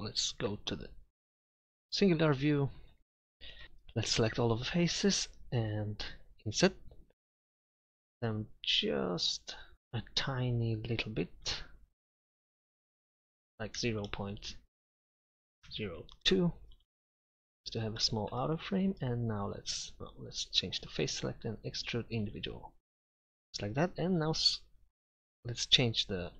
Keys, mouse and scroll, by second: 2.9 KP_Divide, 3.6 a, 11.6 i, 17.6 middle click, 24.1 s, 24.7 right click.